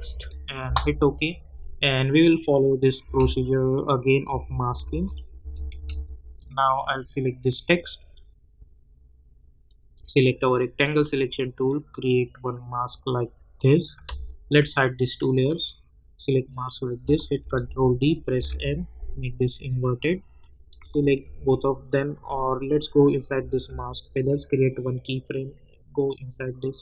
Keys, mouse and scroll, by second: 0.0-0.2 typing, 0.6 Return, 2.5 click, 3.0 space, 6.8-14.9 drag, 17.4 ctrl+d, 18.3 m, 19.5 click, 21.0 shift+click, 22.3 click.